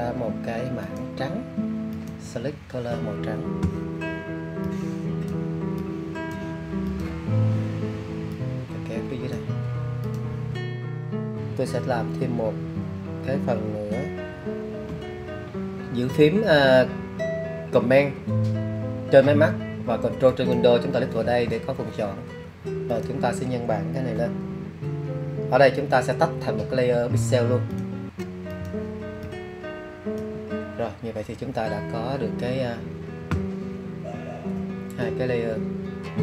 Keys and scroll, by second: 21.3 super+j.